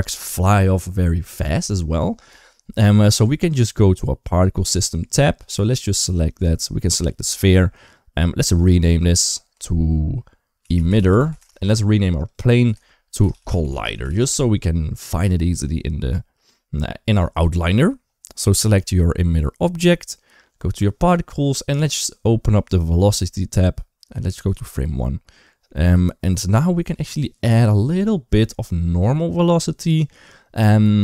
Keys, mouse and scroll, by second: 2.8 click, 8.2 click, 8.3-11.2 drag, 12.0 click, 12.1-14.0 drag, 13.4 l, 22.5 click, 24.4 click.